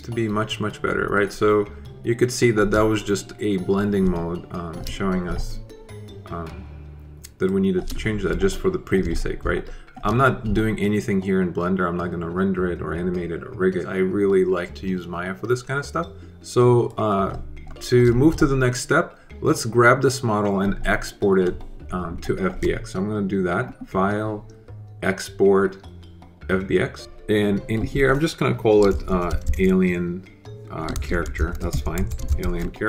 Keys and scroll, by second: 28.6-32.8 typing.